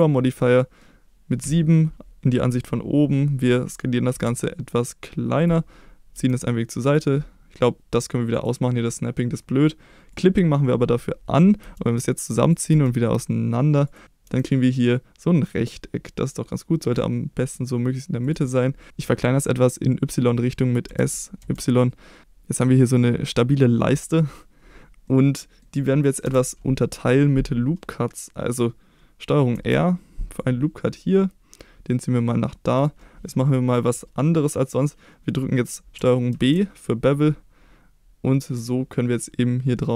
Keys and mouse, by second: 0.0 click, 0.4 middle click, 1.4 KP_7, 4.1 s, 5.3 click, 6.1 g, 6.8 click, 8.3 click, 10.1 click, 11.6 g, 12.4 click, 12.7 g, 13.8 click, 14.2 g, 18.2 click, 20.8 s, 21.4 y, 22.9-23.9 middle drag, 25.0 middle click, 26.2 KP_7, 29.5 ctrl+r, 36.3 ctrl+b.